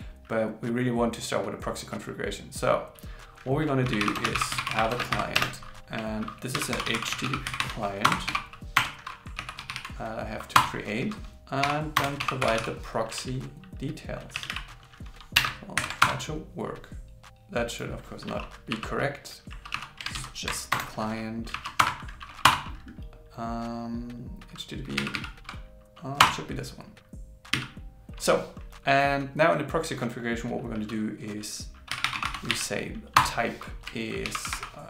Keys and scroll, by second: 5.1 shift+0, 6.6 shift+h, 8.1 shift+c, 15.8 alt+8, 21.8 alt+Return, 34.0-34.8 typing.